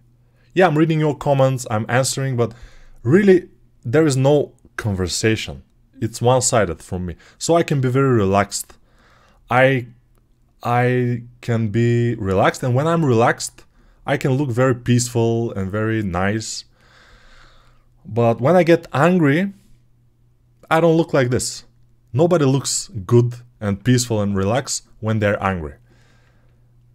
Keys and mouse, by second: 26.5 alt+click.